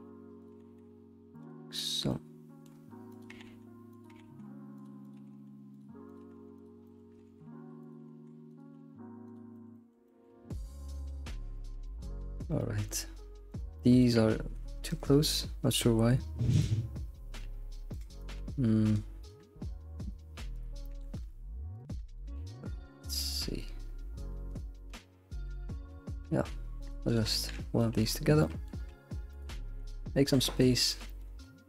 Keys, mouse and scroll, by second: 0.5 g, 1.8-3.1 shift+middle drag, 3.1 click, 3.3 g, 4.1 g, 5.0 click, 5.1 g, 6.1 click, 6.6 g, 6.8 shift+middle click, 7.2 alt+x, 7.5 alt+x, 7.8 click, 8.0 g, 8.6 g, 9.5 shift+middle click, 10.5 scroll down 2, 10.6 shift+middle click, 11.4 scroll down 1, 11.5 middle click, 12.1-12.6 scroll up 5, 12.6 middle click, 13.5 click, 13.8 middle click, 14.2 g, 15.3-16.5 middle drag, 16.5 click, 17.0 scroll down 2, 17.4 g, 18.2 click, 18.4 g, 19.2 click, 20.5 click, 21.1 g, 22.1 click, 22.4 g, 27.1 shift+click, 27.3 1, 27.6 scroll down 1, 27.8 middle click, 28.2 scroll down 2, 28.4 middle click, 28.8-29.3 scroll up 1, 29.3 click, 29.5 g, 30.1 scroll down 1, 30.3 middle click.